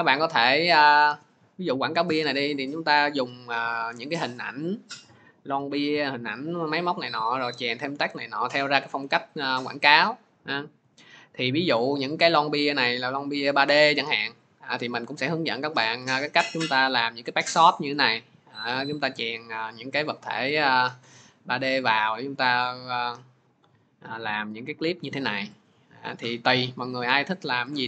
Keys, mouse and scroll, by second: 8.4 click, 11.5 click, 12.1 click, 20.4 click, 21.2 click, 21.7 click, 23.0 click, 23.6 click, 24.2 click, 25.0 click, 25.5 click, 26.4 click, 26.4 click, 26.8 click.